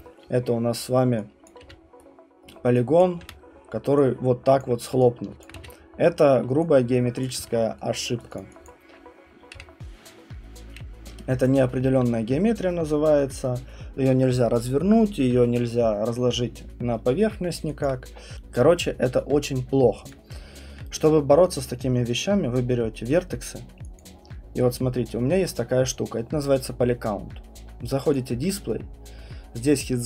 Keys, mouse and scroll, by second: 1.5 click, 1.6 f, 2.5 right click, 3.0 click, 3.2 r, 4.6 click, 5.4 alt+click, 5.5 q, 6.1-6.7 scroll, 7.2 alt+click, 7.4 q, 8.2 right click, 8.4 click, 8.7 click, 9.5 Delete, 11.4 click, 11.9 alt+middle click, 12.0 middle click, 17.8 alt+click, 18.1 middle click, 20.1 click, 20.7 middle click, 23.0 right click, 24.0 alt+click, 28.1 click.